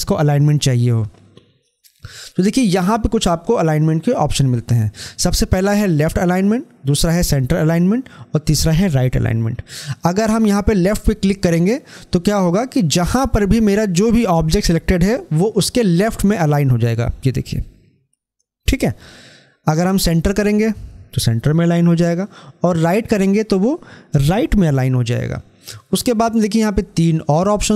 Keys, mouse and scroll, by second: 20.3 click, 23.0 click.